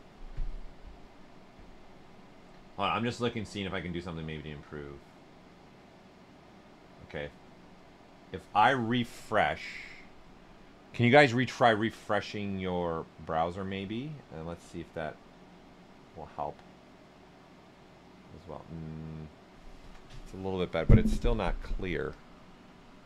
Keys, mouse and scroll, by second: 22.5 click, 22.5 typing.